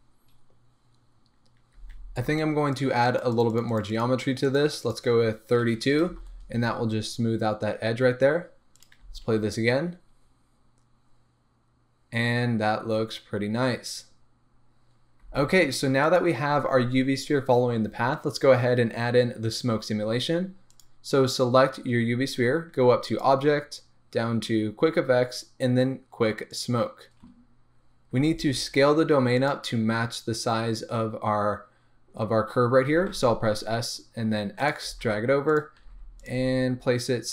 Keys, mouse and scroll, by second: 1.8 space, 4.8-16.3 drag, 6.1 Return, 9.0 space, 15.3 space, 20.7 click, 23.1-29.5 drag, 27.4-28.1 scroll down 1, 28.1 s, 32.9 s, 34.7 click, 34.9 g, 35.6 click, 35.8 s, 36.3 click, 36.3 g.